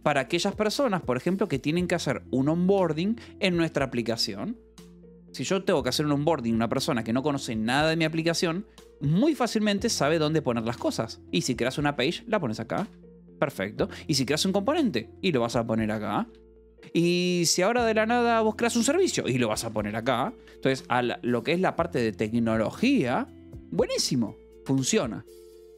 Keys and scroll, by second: 0.0-1.4 typing, 4.0 Escape, 8.7 k, 10.3-13.7 typing, 11.2 Escape, 12.8 Escape, 15.0-19.3 typing, 16.3 Escape, 17.4 Escape, 19.8 Escape, 20.5 u.